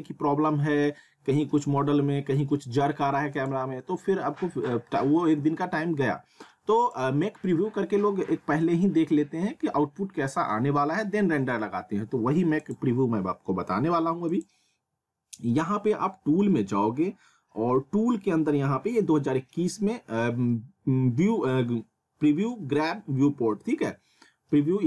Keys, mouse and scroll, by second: 3.3 click, 6.8 click, 12.6 click.